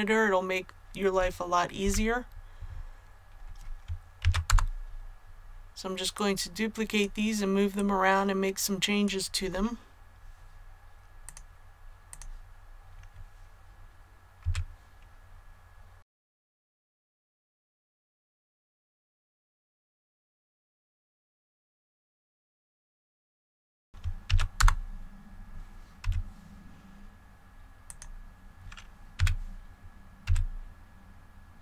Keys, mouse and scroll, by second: 1.8 KP_1, 4.2 shift+d, 4.4 Return, 6.1-9.3 drag, 14.4 r, 15.9 click, 16.0 scroll down 1, 16.1 scroll up 1, 16.4 click, 16.5 middle click, 16.7-22.1 typing, 16.8 Return, 16.9 click, 17.3 click, 17.8 click, 18.0 middle click, 18.1 scroll up 1, 18.6 click, 19.3 click, 19.7 click, 19.8 middle click, 20.5 ctrl+d, 20.6 Return, 20.9 click, 21.0 middle click, 21.3 scroll up 1, 21.7 click, 22.3 click, 22.3 scroll down 1, 22.5 middle click, 22.8 click, 23.5 middle click, 23.6 a, 23.8 |, 24.2 shift+d, 24.5 Return, 26.0 g, 27.8 click, 29.1 r, 30.2 z.